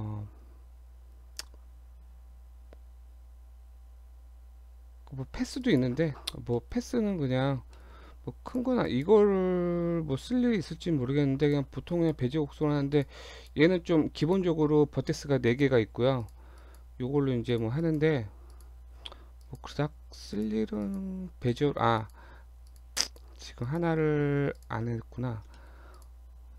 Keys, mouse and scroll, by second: 6.3 shift+scroll up 2, 6.6 shift+middle click, 7.0-7.6 scroll up 4, 7.2 Tab, 7.8 shift+middle click, 8.1-8.4 scroll up 1, 8.5 click, 8.9 click, 10.9 g, 11.9 click, 12.4 g, 13.4 click, 13.8 g, 15.5 click, 15.9 g, 16.6 click, 17.1 g, 17.9 click, 18.2 g, 18.9 scroll down 1, 19.4 click, 19.8 g, 20.9 click, 21.2 g, 22.0 click, 22.3 g, 23.1 click, 23.4 g, 24.2 scroll down 1, 24.6 shift+click, 25.6 shift+middle click, 26.0 click, 26.3 Tab.